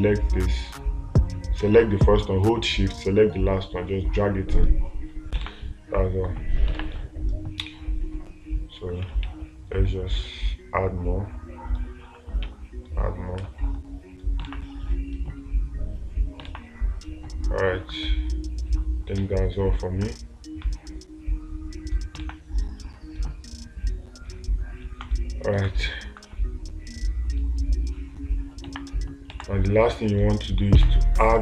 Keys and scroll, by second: 5.9 space, 7.2 space, 14.9 space, 16.9 space, 29.8 space.